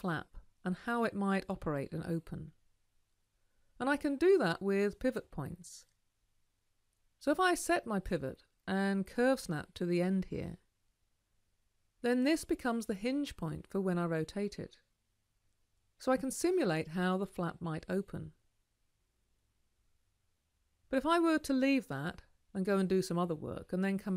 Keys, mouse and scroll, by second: 9.6-13.1 ctrl+alt+drag, 16.1-20.6 middle drag.